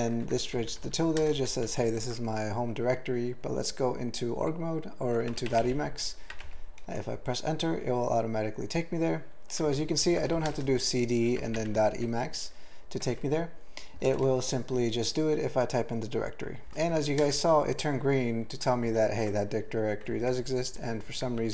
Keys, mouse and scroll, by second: 0.2 ctrl+p, 0.3 ctrl+e, 0.5 ctrl+b, 0.7 ctrl+b, 0.9 ctrl+b, 1.2 ctrl+space, 1.3 ctrl+f, 1.6 ctrl+g, 1.8 ctrl+n, 5.3 typing, 6.9 Return, 9.8 ctrl+p, 10.0 ctrl+n, 10.3 typing, 12.1 Tab, 13.0 Tab, 14.1 alt+BackSpace, 16.9 ctrl+p, 17.1 ctrl+p, 17.2 ctrl+e, 18.0 ctrl+g, 18.6 ctrl+n, 18.8 ctrl+n, 20.3 ctrl+p, 20.4 ctrl+p, 20.6 ctrl+p, 20.9 ctrl+a, 21.3 ctrl+n.